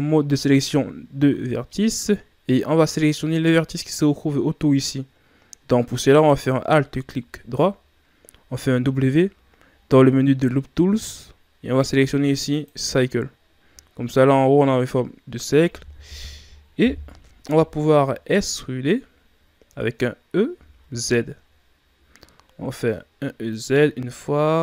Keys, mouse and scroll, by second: 6.9 alt+right click, 8.7 w, 16.8 KP_1, 17.9-18.6 shift+scroll up 4, 18.6 scroll up 2, 20.6 e.